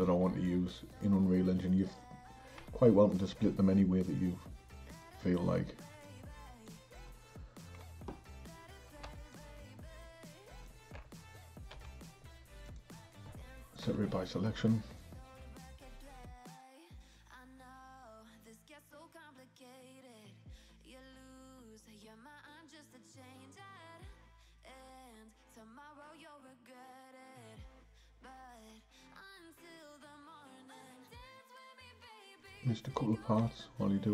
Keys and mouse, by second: 2.8 Tab, 3.1 click, 5.0-6.2 drag, 9.3 shift+click, 11.8 p, 13.9 Tab, 16.0 click, 17.0 Tab, 19.5-22.8 typing, 24.1 p, 26.0 click, 26.8 Tab, 27.4 click, 28.7 h, 29.3 click, 29.7 h, 30.4 click, 31.8 Tab, 32.4 click, 33.4-34.1 l.